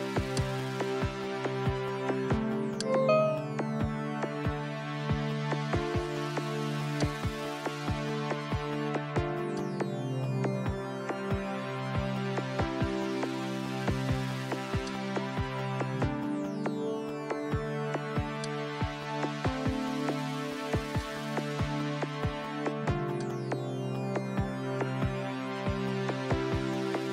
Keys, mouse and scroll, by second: 0.4 click, 2.8-4.7 drag, 4.2 KP_3, 4.4 KP_5, 4.7 KP_Enter, 7.0-9.5 drag, 10.8 click, 11.2 KP_1, 11.5 KP_2, 12.3 KP_Enter, 14.9 click, 18.3 click, 21.0 click, 23.2 click, 25.0 shift+1.